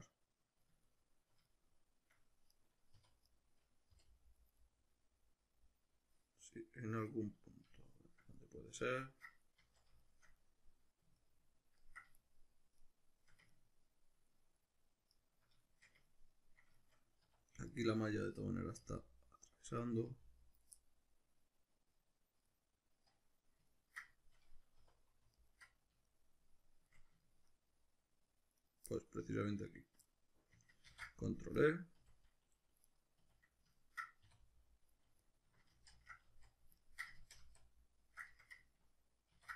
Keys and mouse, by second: 2.5 right click, 3.0 3, 3.2 right click, 3.9 l, 4.6-17.7 middle drag, 9.6 z, 17.3 1, 17.7 right click, 18.8 g, 19.5 click, 19.8 right click, 20.1 g, 20.6 click, 20.8-25.4 middle drag, 24.8 2, 25.4 alt+right click, 26.1-28.6 shift+middle drag, 28.6 right click, 28.9-29.7 middle drag, 29.7 ctrl+right click, 30.1-33.0 middle drag, 30.9 ctrl+e, 32.0 s, 33.0 right click, 33.2 a, 33.8-35.4 ctrl+middle drag, 34.2 e, 35.4 right click, 35.7 ctrl+z, 36.2 z, 36.8-38.6 ctrl+middle drag, 37.2 ctrl+z, 39.3 ctrl+e.